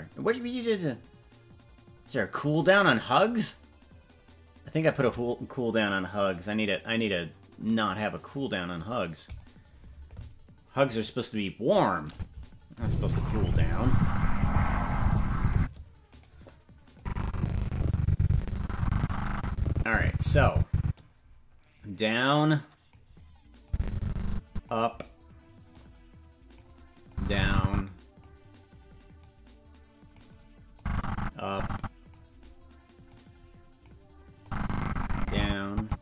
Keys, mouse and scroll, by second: 12.1 click, 12.7 space, 15.5 space, 16.2 right click, 16.9-20.9 drag, 21.9-22.9 drag, 23.6-24.7 drag, 25.7 click, 27.1-28.2 drag, 29.2-30.2 drag, 30.7-32.1 drag, 33.0 click, 34.4-35.9 drag.